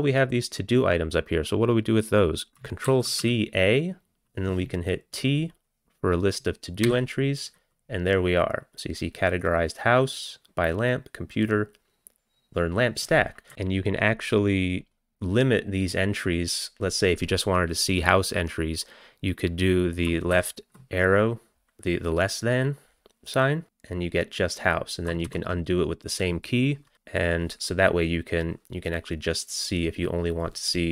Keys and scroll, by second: 2.9 ctrl+c, 3.2 a, 6.9 t, 20.4 <, 25.3 <.